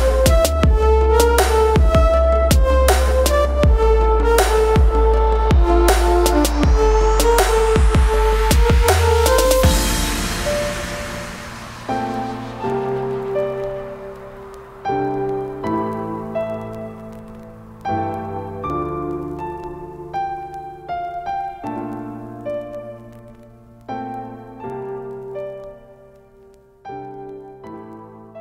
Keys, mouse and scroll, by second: 2.1 click, 3.9 click, 6.5 click, 9.7 click, 15.8 right click, 17.3 click, 18.4 right click, 19.0 click, 20.4 ctrl+space, 20.5 ctrl+click, 20.8 ctrl+space, 21.3 space, 21.7 click, 24.5 click.